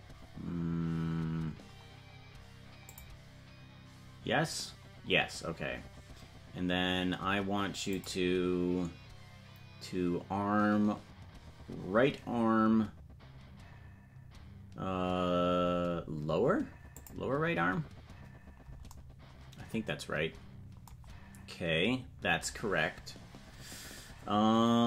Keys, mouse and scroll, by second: 7.9-17.6 drag.